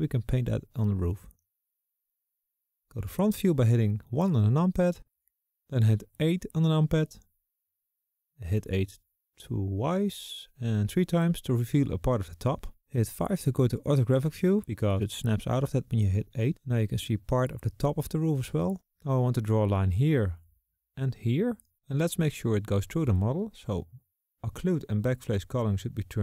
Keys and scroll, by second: 2.3 s, 2.3 KP_1, 6.1 KP_8, 9.4 KP_8, 10.4 KP_8, 13.6 KP_5.